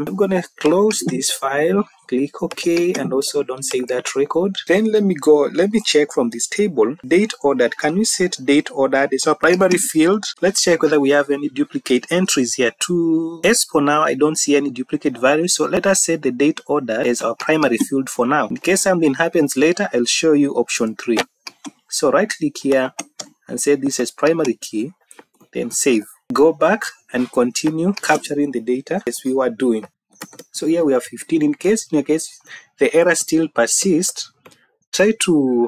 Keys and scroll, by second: 8.5 Down, 10.0 Down, 25.7 ctrl+s, 29.9-30.7 typing, 31.3 Right, 32.9 Right.